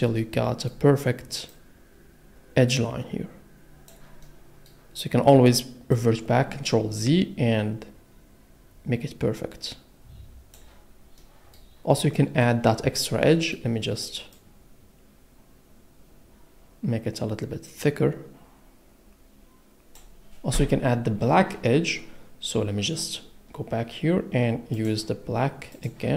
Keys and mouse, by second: 4.2 middle click, 5.9 click, 11.2 middle click, 13.3 middle click.